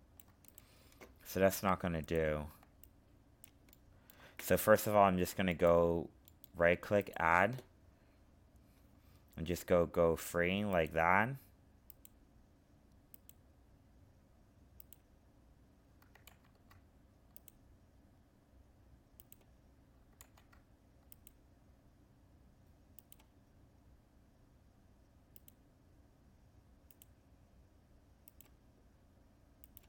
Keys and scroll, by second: 16.2 ctrl+z, 20.1 ctrl+z.